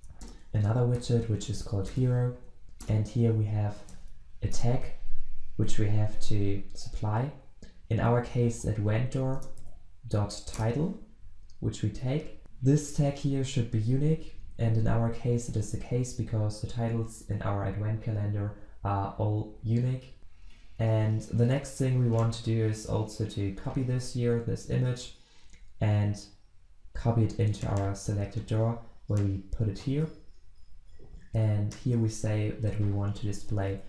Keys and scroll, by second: 3.8 ctrl+space, 4.5 Return, 9.3 Return, 23.9 ctrl+c, 29.9 ctrl+v.